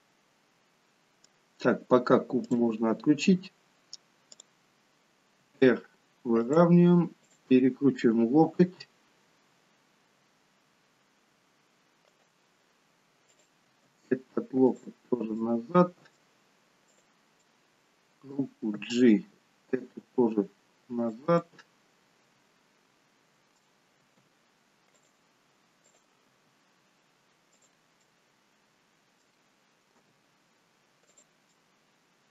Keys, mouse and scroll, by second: 2.4 click, 3.0-4.2 scroll up 1, 4.2 click, 4.2-4.9 scroll up 2, 5.4 r, 7.2 click, 8.6 r, 13.2 click, 13.7 r, 15.3 middle click, 16.8 click, 17.3 middle click, 18.8 g, 21.3 middle click, 24.0 r, 25.8 click, 26.2 r, 27.9 middle click, 30.0 g, 31.5 middle click.